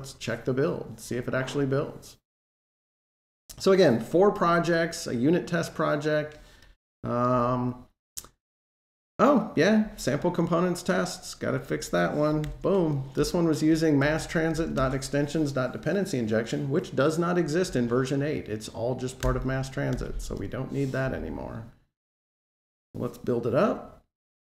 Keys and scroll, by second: 12.3 super+Down, 19.0 Delete, 19.7 super+s, 22.3 shift+super+b.